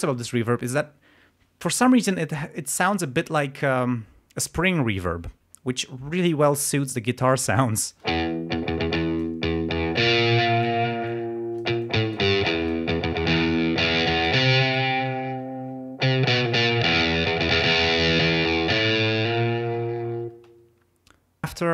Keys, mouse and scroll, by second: 7.3 click, 8.0 space, 8.9 click, 9.9 click, 11.0-12.9 drag, 14.0 click, 14.1-14.9 scroll up 2, 20.3 space.